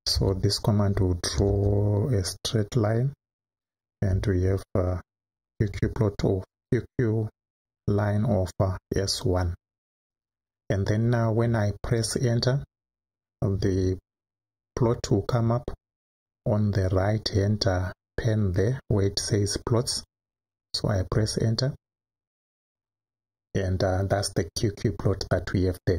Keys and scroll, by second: 0.0-1.4 typing, 5.3 shift+s, 8.7 1, 12.8 Right, 21.0 Return.